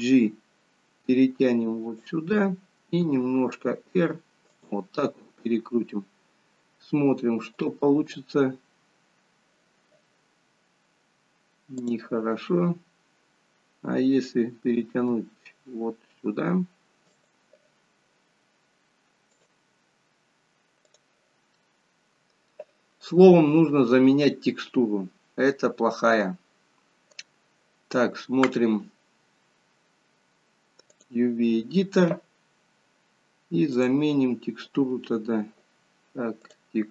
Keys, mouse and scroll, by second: 7.8 click, 8.8-10.6 scroll down 1, 21.2 click, 21.7 middle click.